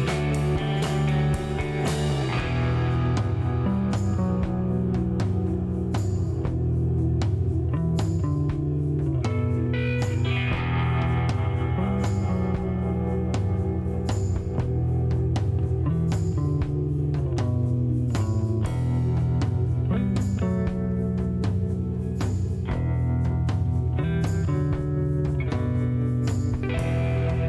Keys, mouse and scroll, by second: 1.0 scroll up 1, 1.4 middle click, 1.7 scroll up 1, 4.3 click, 5.7 click, 6.1 right click, 8.8 click, 10.7 click, 13.4 click, 14.2 right click, 15.5 click, 16.5 scroll down 1, 16.8 shift+right click, 17.9 middle click, 18.2 scroll down 2, 18.4 middle click, 19.0 shift+right click, 20.0 scroll up 1, 20.3 middle click, 22.6 click, 24.6-25.6 typing, 26.6 click.